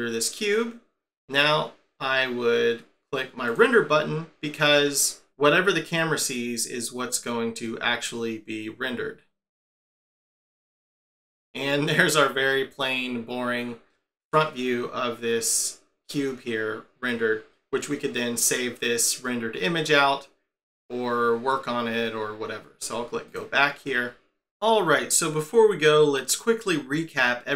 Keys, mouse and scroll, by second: 3.4 click, 23.3 click.